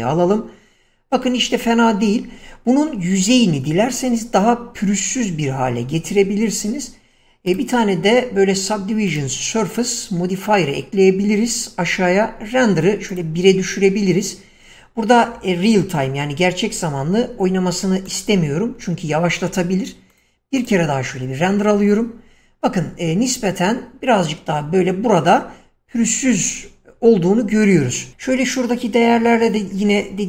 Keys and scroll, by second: 5.3 Escape, 27.5 Escape.